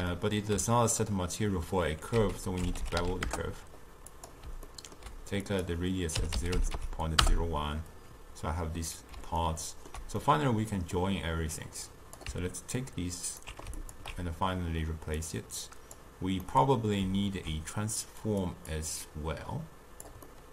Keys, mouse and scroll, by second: 2.3 ctrl+a, 4.8 ctrl+middle click, 5.5-8.6 drag, 9.5-11.7 ctrl+middle drag, 11.7 click, 12.9-13.9 alt+right drag, 13.9 alt+shift+click, 15.3-16.5 drag, 16.5-18.3 middle drag, 18.3 click, 18.8-20.3 drag, 20.3-20.5 middle drag.